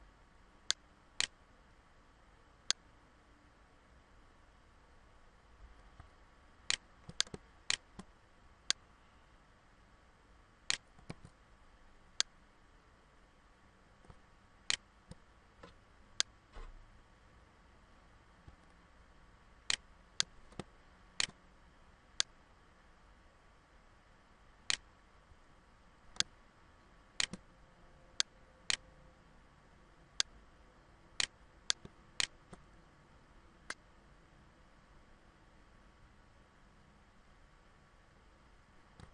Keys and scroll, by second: 10.6 ctrl+z, 12.0 ctrl+z.